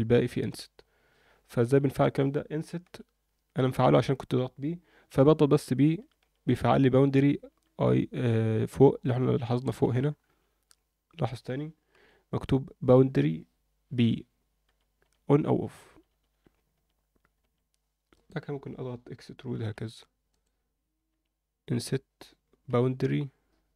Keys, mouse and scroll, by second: 1.6 ctrl+z, 2.0 click, 2.8 i, 11.9 i, 19.5 e, 21.1 i.